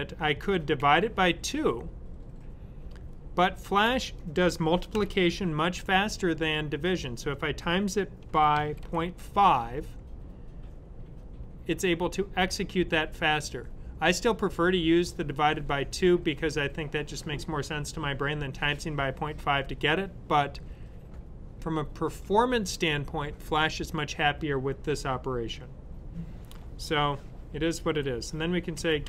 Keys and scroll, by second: 0.2-1.0 typing, 4.8 typing, 7.9-9.2 typing, 27.5-29.0 typing.